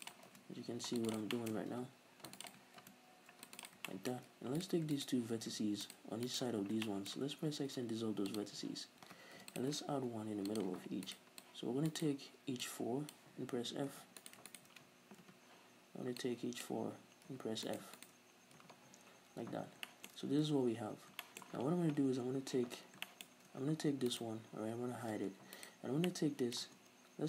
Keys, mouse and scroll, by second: 0.0 click, 0.1 right click, 0.2 ctrl+r, 1.1 click, 1.3-2.4 shift+middle drag, 1.7 ctrl+r, 2.4 click, 2.5 right click, 2.7 ctrl+r, 3.6 click, 3.9 right click, 3.9 shift+middle click, 4.5 right click, 4.9 shift+right click, 5.8 shift+right click, 6.2 right click, 6.5 scroll up 2, 6.8-8.0 shift+middle drag, 7.3 x, 9.3 ctrl+r, 9.6 click, 9.9 ctrl+r, 10.5 click, 11.1 right click, 11.4 click, 12.0 right click, 12.6 click, 13.9 f, 14.2 right click, 14.5 shift+right click, 15.2 f, 16.2 click, 17.3 f, 17.6 right click, 17.9 shift+right click, 18.6 f, 18.9 middle click, 18.9 scroll down 2, 19.3 a, 19.5 middle click, 19.5-19.8 scroll down 2, 19.8-20.9 shift+middle drag, 20.1 a, 20.9 scroll up 2, 21.2-24.1 shift+middle drag, 22.7-23.0 scroll down 2, 23.5 Tab, 24.1 right click, 25.1 h, 25.6 right click, 26.0-27.2 middle drag, 26.6 Tab.